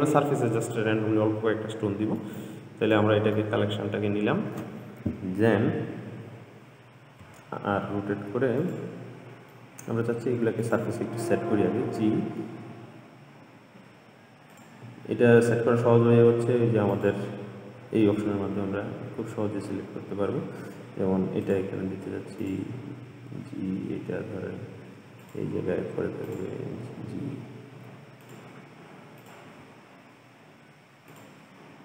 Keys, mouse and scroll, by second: 1.0-2.4 scroll up 1, 2.4 drag, 3.6-6.7 middle drag, 7.4 r, 9.8-10.8 middle drag, 10.8 click, 11.9 g, 17.2 click, 18.1-19.3 scroll up 3, 19.3 g, 22.6 click, 23.4 g, 26.5 click, 26.9 g, 29.4 click, 29.7 g.